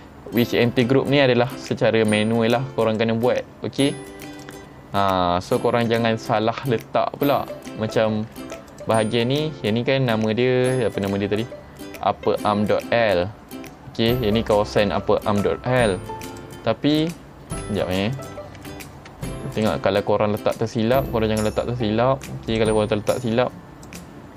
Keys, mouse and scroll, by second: 2.9 right click, 4.4 click, 6.3 ctrl+Tab, 8.2 ctrl+Tab, 8.7 click, 9.1-9.4 middle drag, 11.0 click, 15.0 Tab, 16.3 click, 17.0 click, 17.9 ctrl+Tab, 18.2 click, 18.6 Tab, 19.6 click, 20.2-20.7 scroll up 5, 20.2 middle click, 20.8 shift+middle click, 22.5 click, 23.2 click.